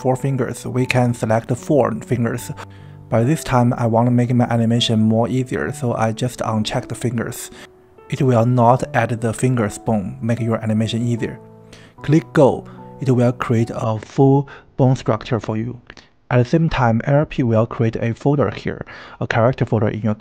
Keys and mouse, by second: 4.3 KP_1, 6.7 click, 10.4 click, 15.5 KP_7.